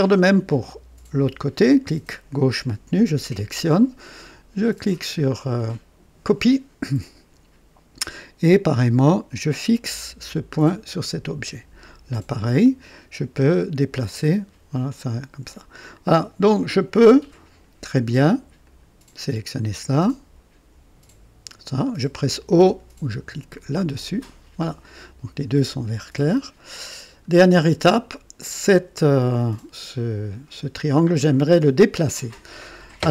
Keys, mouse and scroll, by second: 0.1 click, 6.3 click, 10.6 click, 12.4 right click, 12.9 click, 14.1-15.7 drag, 18.6 click, 21.4 click, 23.9 o, 26.9 scroll up 1.